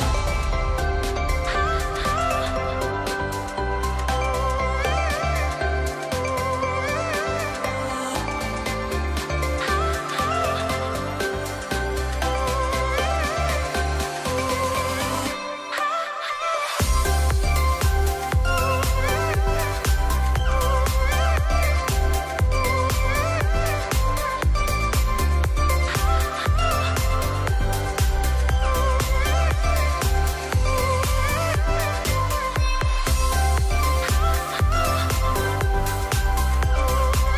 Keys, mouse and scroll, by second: 0.2-2.1 drag, 3.8 ctrl+t, 4.9-9.0 drag, 17.1 Return, 21.4 alt+click, 26.4 shift+click, 30.2 ctrl+g, 32.6 click.